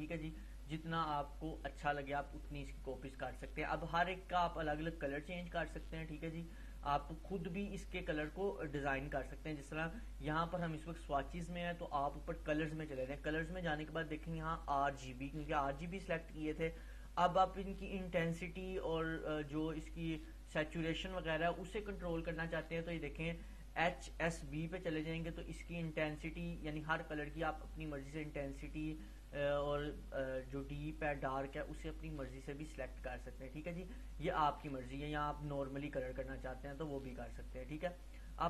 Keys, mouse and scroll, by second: 4.2-5.1 click, 12.6 click, 22.3-27.5 drag.